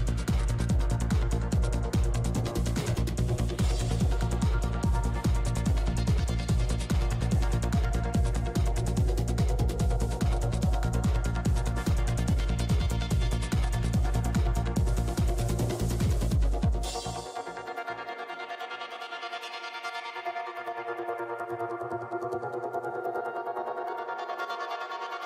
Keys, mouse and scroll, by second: 0.3 f, 0.6 click, 1.2 ctrl+z, 1.4 shift+f, 2.0-4.8 drag, 2.5 middle click, 4.8 g, 4.8 f, 5.0 middle click, 5.7 f, 6.4 click, 7.7 click, 8.0 f, 8.8 click, 9.6 ctrl+z, 10.7-11.9 drag, 10.8 middle click, 11.0 f, 11.7 middle click, 11.9 f, 12.5 click, 12.7 f, 13.2-16.4 drag, 13.2 middle click, 13.9 f, 14.4 f, 15.0 f, 15.3 f, 17.9 f, 18.1-19.9 drag, 18.3-19.6 middle drag, 18.3-19.6 right drag, 18.4 f, 19.0 f, 19.7 f, 19.9 middle click, 19.9 right click, 20.0-21.0 drag, 20.0 middle click, 20.0 right click, 21.0-22.2 middle drag, 22.4 f, 22.6 click, 22.8 f, 23.6-24.8 middle drag, 24.8 i.